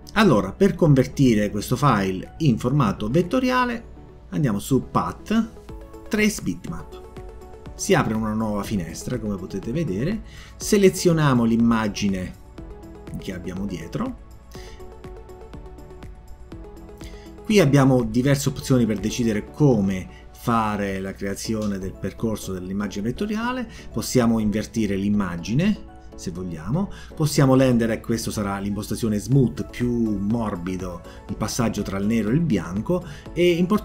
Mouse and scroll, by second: 4.1 click, 6.7 click, 17.6 click, 18.7 click, 19.9 click.